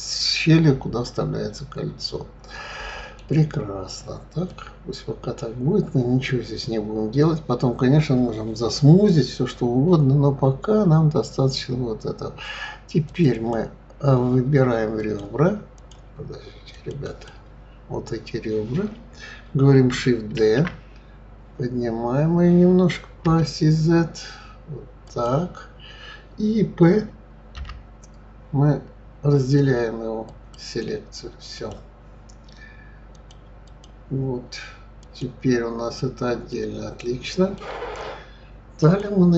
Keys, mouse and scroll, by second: 0.1-3.0 middle drag, 3.7-4.5 scroll up 2, 4.5-7.5 middle drag, 13.0 click, 13.3 click, 15.0 click, 15.7 click, 16.7 click, 17.0 click, 20.4 shift+d, 27.6 p, 31.5 click, 33.1-35.2 drag, 36.5-38.8 middle drag, 38.8-39.3 drag.